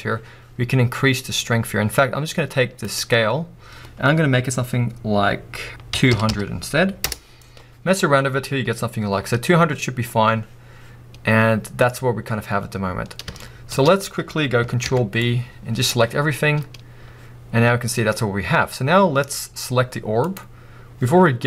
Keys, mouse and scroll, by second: 7.1 0, 7.4 Return, 11.4 scroll down 2, 13.4-20.5 shift+middle drag, 13.9 scroll down 1, 14.8 ctrl+b, 16.2-17.6 scroll up 2, 17.6-18.7 scroll up 1, 18.7-20.0 scroll up 1, 20.0-20.5 scroll up 1, 20.5 click.